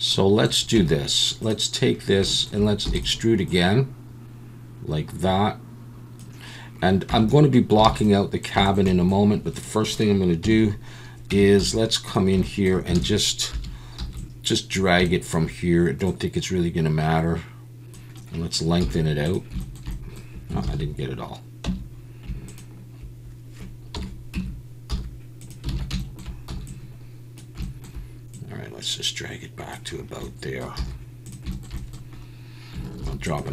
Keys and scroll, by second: 0.7 Tab, 2.8 e, 7.1 Tab, 7.8 alt+a, 10.4 KP_7, 11.3 Tab, 11.6 z, 13.0 alt+a, 13.5 1, 14.0 b, 18.8 z, 20.6 ctrl+z, 21.7 Tab, 23.9 KP_7, 24.3 Tab, 24.9 z, 25.7 alt+a, 26.5 b, 30.8 z, 33.0 ctrl+r.